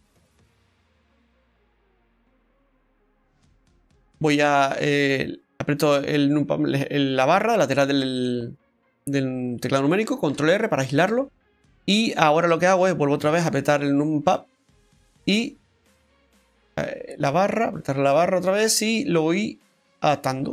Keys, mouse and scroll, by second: 0.3 middle click, 1.7 ctrl+z, 3.0 middle click, 7.4 scroll up 2, 8.0 middle click, 8.0 scroll up 1, 10.3 ctrl+r, 13.2 KP_Divide, 14.3 middle click, 15.6 click.